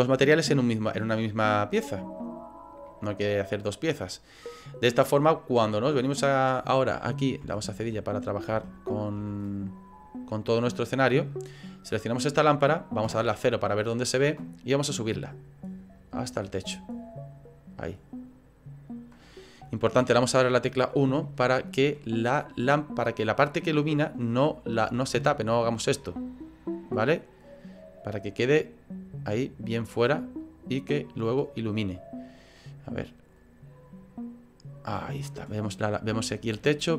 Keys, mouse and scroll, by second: 21.2 shift+middle click, 22.1-24.1 scroll up 2, 36.2 shift+middle click.